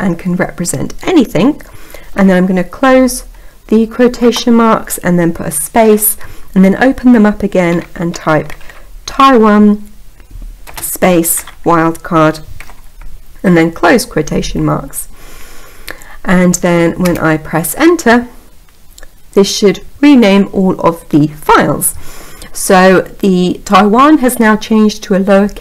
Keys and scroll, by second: 16.2 Return.